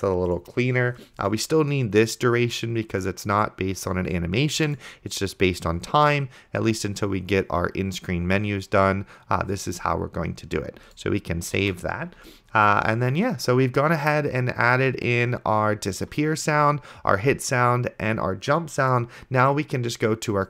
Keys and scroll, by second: 11.9 ctrl+s.